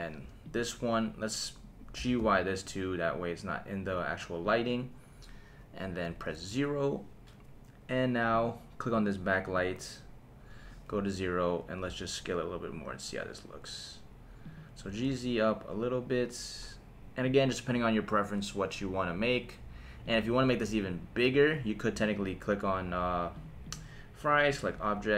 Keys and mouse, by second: 0.4 click, 1.9 g, 2.2 y, 4.4 click, 6.0 KP_0, 8.3 click, 8.9 click, 9.4 click, 10.9 KP_0, 11.8 s, 14.4 click, 14.8 g, 15.1 z, 17.2 click, 20.0 click, 22.0 click, 23.3 click, 23.7-25.1 right drag.